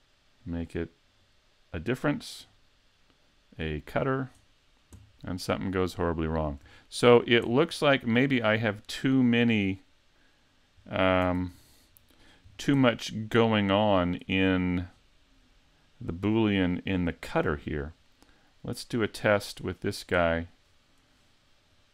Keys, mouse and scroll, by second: 0.4 click, 2.4 click, 6.8 shift+middle click, 7.5 middle click, 9.6 middle click, 10.8-11.4 scroll down 2, 11.4 super+z, 12.2 right click, 12.5-12.8 scroll down 2, 12.8 middle click, 13.4 middle click, 14.5 click, 16.4 middle click, 17.0 shift+middle click, 17.5-17.8 scroll down 2, 19.0 right click, 19.9 right click, 21.7 click.